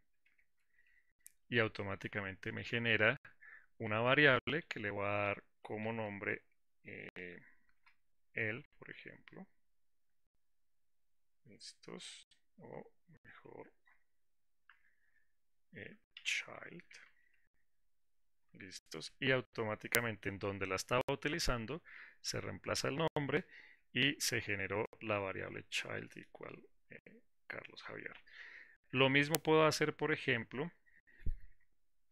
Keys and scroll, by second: 0.9 ctrl+alt+v.